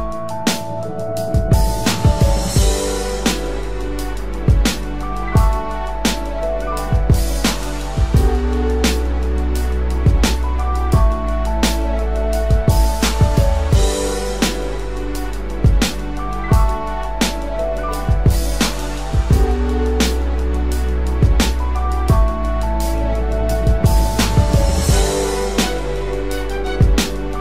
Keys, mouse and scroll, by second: 0.9 ctrl+click, 2.9 ctrl+click, 4.7 ctrl+click, 5.2 space, 7.1 ctrl+click, 7.5 space, 8.2 ctrl+click, 10.6 ctrl+click, 13.7 ctrl+Return, 22.1 ctrl+-, 22.4 ctrl+-, 22.7 ctrl+-, 23.0 ctrl+-.